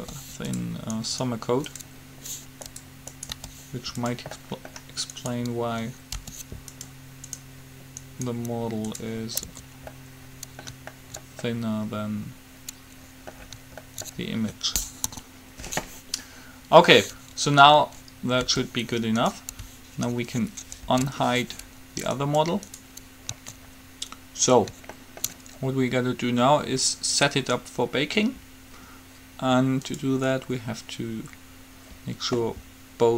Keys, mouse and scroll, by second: 0.1 g, 1.3 right click, 3.6 g, 4.6 middle click, 6.3 g, 9.6 Tab, 15.3 KP_3, 18.8 g, 21.1 alt+h, 22.3-24.3 right drag, 25.5-26.6 middle drag, 30.0-31.8 drag.